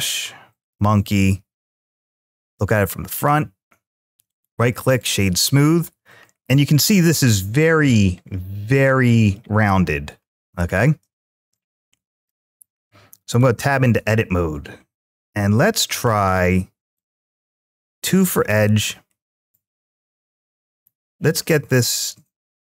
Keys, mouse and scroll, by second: 2.1 `, 4.1 right click, 6.0 scroll up 2, 6.6-7.8 middle drag, 8.0 scroll down 2, 8.5-9.2 middle drag, 10.1 middle click, 11.2 `, 13.2 Tab, 14.9 middle click, 16.7 click, 18.1 2, 20.5 alt+click, 21.3 scroll down 1, 21.3-22.6 middle drag.